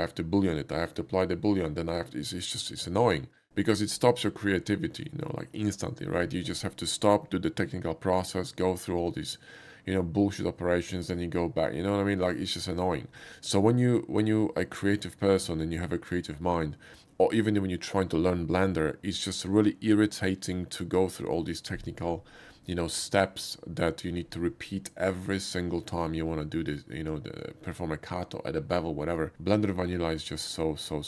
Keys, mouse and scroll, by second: 26.2-27.7 middle drag, 29.4-31.0 middle drag.